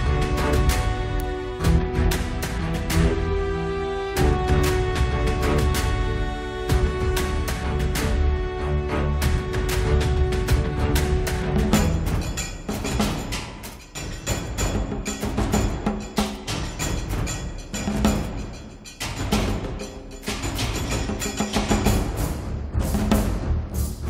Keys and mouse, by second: 0.7-2.0 drag, 1.6 g, 2.2 f, 2.8 g, 3.2 f, 3.6 middle click, 4.4 KP_1, 6.3 click, 6.9-8.3 middle drag, 7.7 click, 7.7 right click, 8.5 middle click, 8.8 click, 10.1-11.3 drag, 11.2-12.2 middle drag, 12.2 click, 12.7 KP_1, 13.7-15.2 drag, 14.7-16.4 middle drag, 14.7 right click, 15.9 click, 15.9 right click, 16.6 middle click, 17.6 click, 17.6 right click, 18.2 middle click, 18.5-21.6 drag, 18.5 right click, 21.6-23.6 middle drag, 23.6 click.